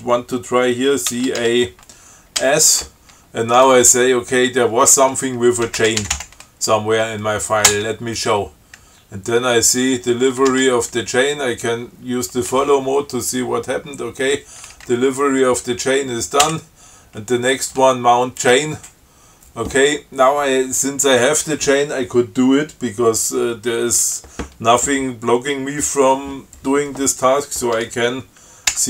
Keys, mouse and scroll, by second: 1.4 ctrl+c, 1.7 ctrl+a, 2.7 s, 5.7-6.9 typing, 7.9 Return, 9.6 Down, 10.8 shift+f, 16.7 Down.